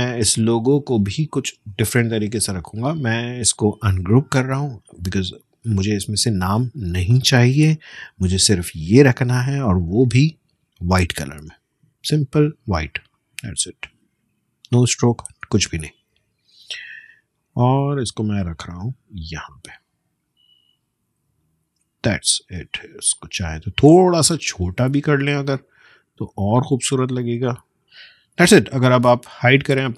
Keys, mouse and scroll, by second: 0.0-1.6 drag, 1.6 space, 1.6 click, 2.1 space, 3.1 right click, 4.6-7.0 drag, 7.0 BackSpace, 8.2-10.2 drag, 13.1-21.4 drag, 21.8 space, 22.0 click, 22.4 space, 23.1 click, 24.2-26.9 shift+drag, 28.3 ctrl+;, 29.0 space, 29.4 click, 29.6 space.